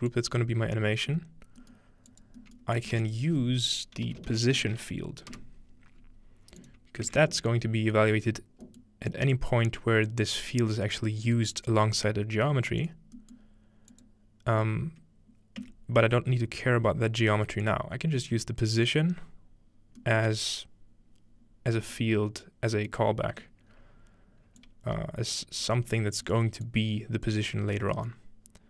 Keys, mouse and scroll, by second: 0.1 click, 2.1 click, 2.8 shift+click, 3.0 shift+a, 3.1 shift+click, 3.7-5.0 shift+drag, 4.0-4.9 typing, 5.4 Return, 6.6-8.2 drag, 7.6-8.2 scroll down 2, 8.7 middle click, 9.1-11.6 drag, 11.4 right click, 12.5 click, 12.7 right click, 13.9 click, 15.6 Tab, 16.3 scroll up 2, 17.6-18.9 drag, 19.3 scroll up 2, 19.7-20.2 scroll down 2, 20.2-21.8 middle drag, 22.0 middle click, 22.9-24.6 middle drag, 23.7-24.6 scroll up 2, 24.6-25.3 drag, 25.6 g, 26.3 drag, 26.7 click, 28.2-28.6 middle drag, 28.5-28.6 scroll up 1.